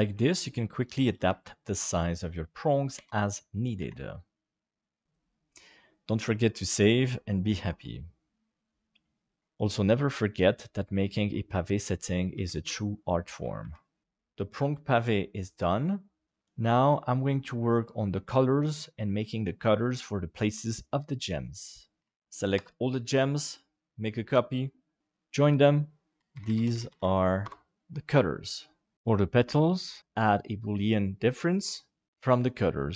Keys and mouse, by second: 0.3 shift+d, 1.2 shift+d, 2.9 alt+a, 3.9 ctrl+s, 9.4 shift+d, 10.1 middle click, 11.0 shift+middle click, 11.6 middle click, 12.3 shift+d, 13.6 shift+d, 14.0 KP_7, 14.3-22.0 middle drag, 23.7 shift+d, 25.9 ctrl+j, 26.2 shift+F2, 26.5 shift+t, 28.9 click, 30.8 click, 31.4-32.8 drag, 32.1 t.